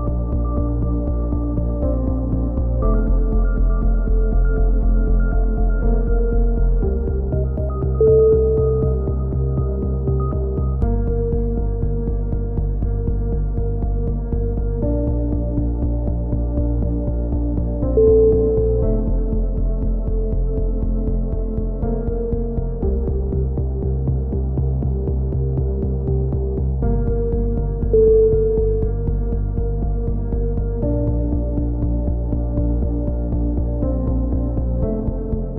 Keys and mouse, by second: 0.0 alt+r, 1.2 click, 1.8 ctrl+z, 2.9 Tab, 2.9 shift+s, 2.9 a, 3.4 a, 8.7 w, 9.2 w, 9.2 a, 12.7 alt+r, 12.7 a, 13.6 click, 14.2 ctrl+z, 18.3 middle click, 18.3 t, 18.5 z, 18.9 a, 19.1 click, 19.7 right click, 20.4 x, 20.7 click, 21.6-22.8 right drag, 22.0 x, 22.8 KP_3, 23.0 click, 23.6 middle click, 24.2 click, 24.5 Tab, 24.9 Tab, 25.7 a, 26.1 a, 26.7 t, 27.0 alt+r, 28.4 click, 28.4-29.9 typing, 28.8 Tab, 29.3 click, 30.2-32.7 drag, 32.7 KP_3, 33.8 Tab, 34.0 right click, 34.3 a, 34.5 a, 34.8 a, 34.9 right click, 35.2 ctrl+l.